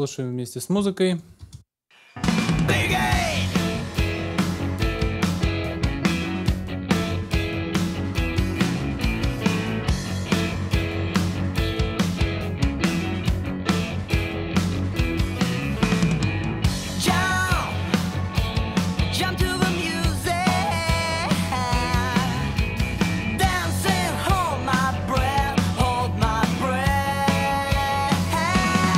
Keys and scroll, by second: 1.4 alt+space, 8.9 super+s.